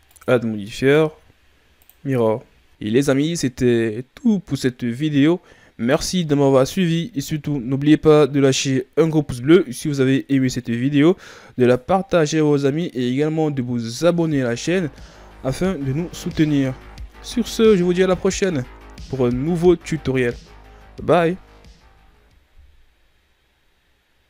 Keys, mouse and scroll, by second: 0.1 click, 2.7-3.5 shift+scroll up 3, 3.5-4.8 scroll up 1, 8.7-10.2 shift+scroll down 1.